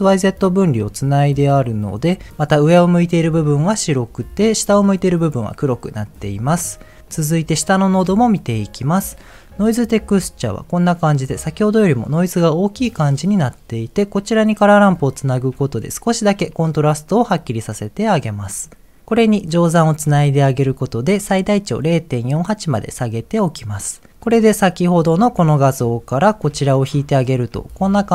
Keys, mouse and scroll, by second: 1.0 ctrl+shift+click, 1.5 ctrl+shift+click, 1.8 ctrl+shift+click, 2.3 middle click, 3.5-4.2 middle drag, 5.7 middle click, 6.3 middle click, 7.0 middle click, 8.6-9.5 scroll up 1, 9.7 ctrl+shift+click, 15.1 ctrl+shift+click, 18.3 middle click, 20.3 ctrl+shift+click, 24.3 ctrl+shift+click, 24.6 ctrl+shift+click, 24.9 ctrl+shift+click, 26.1 ctrl+shift+click, 27.1 ctrl+shift+click.